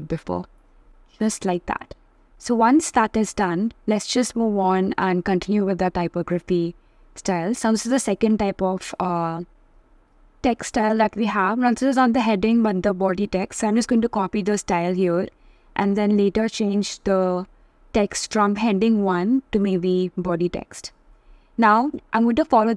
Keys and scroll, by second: 1.8 super+c, 2.1 super+v, 2.3-3.2 typing, 10.2 alt+super+c, 13.0 alt+super+v, 19.6 shift+b.